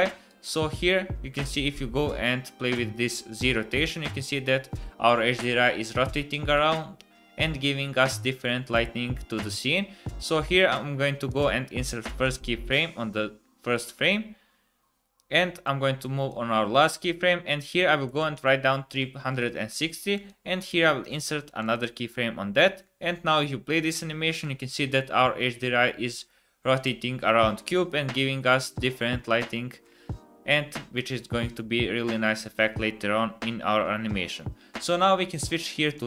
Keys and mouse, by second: 0.4-2.5 drag, 11.4 right click, 20.1 right click, 21.5 click, 22.6-24.4 drag.